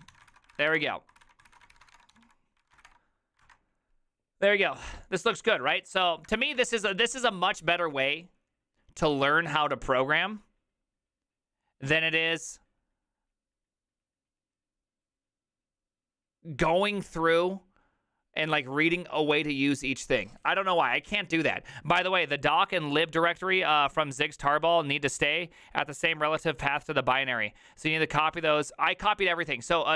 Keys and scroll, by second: 0.0-3.2 typing, 3.4 alt++, 5.8 alt+[, 6.3 alt++, 6.6 alt+f.